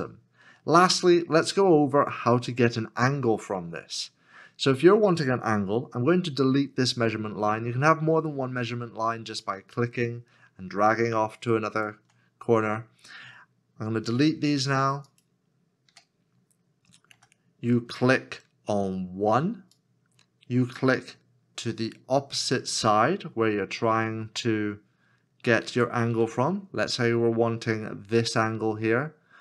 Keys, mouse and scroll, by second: 11.1 ctrl+click, 14.0 x, 17.1 x, 23.4 ctrl+click.